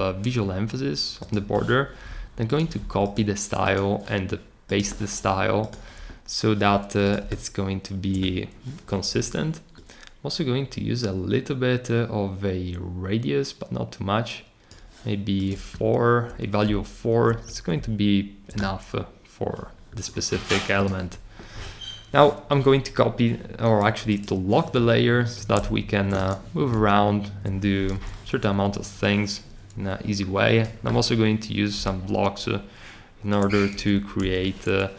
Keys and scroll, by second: 27.9 r, 33.7 super+d, 34.2 super+d.